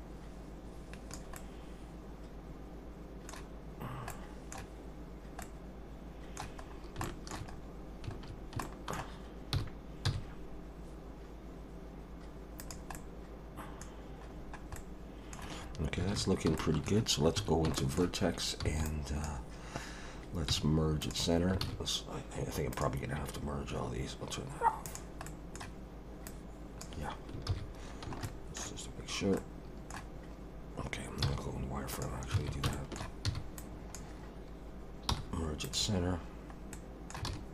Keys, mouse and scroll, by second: 1.4 middle click, 4.1 middle click, 5.4 middle click, 6.6 scroll up 2, 7.0 shift+middle click, 7.5 scroll up 2, 8.3 scroll down 2, 8.6 shift+middle click, 9.5 g, 12.9 middle click, 13.9-14.7 scroll down 3, 14.7 middle click, 16.1 alt+a, 16.6 shift+middle click, 17.4 1, 17.7 shift+middle click, 18.7 b, 20.5 m, 21.6 alt+a, 22.7 click, 24.8 click, 25.3 middle click, 26.3 click, 27.5 ctrl+z, 27.8-28.2 scroll up 2, 28.2 shift+middle click, 28.9 scroll down 1, 29.4 middle click, 31.2 z, 32.4 alt+a, 32.7 shift+middle click, 33.2 b, 35.1 m, 36.7 middle click, 37.3 alt+a.